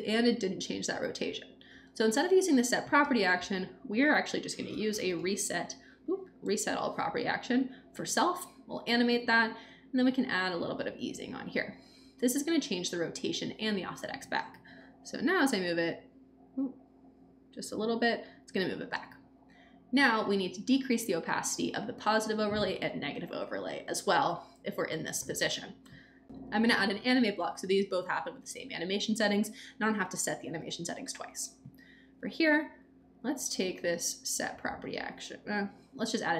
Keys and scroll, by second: 2.9 BackSpace, 4.4-5.8 typing, 6.3 Return, 27.3-28.3 typing.